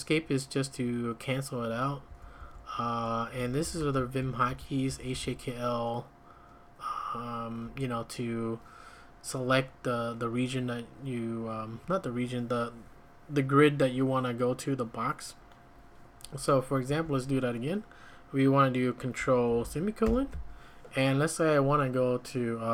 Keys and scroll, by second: 2.1 j, 2.4 j, 3.6-5.1 typing, 7.7 Escape, 16.9 `, 20.0 ctrl+;.